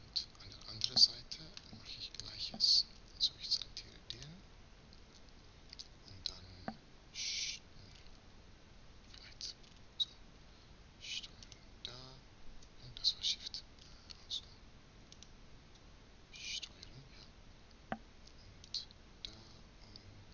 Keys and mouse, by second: 0.6 middle click, 0.8 middle click, 2.2 middle click, 2.6-3.8 middle drag, 3.8-5.4 right drag, 5.4-7.6 drag, 7.6-9.0 middle drag, 9.0-10.0 drag, 9.0 z, 10.0 middle click, 11.2-12.4 drag, 12.4 right click, 13.6-14.8 middle drag, 14.8-17.6 right drag, 20.2-20.3 middle drag.